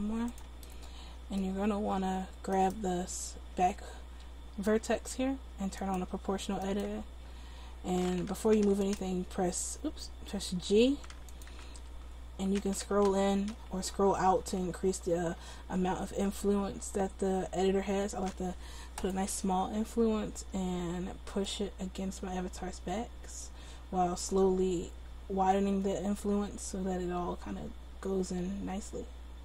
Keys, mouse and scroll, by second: 2.6-5.0 right drag, 5.8-10.6 drag, 10.6 g, 11.8 ctrl+z, 12.7 g, 21.5-26.3 drag.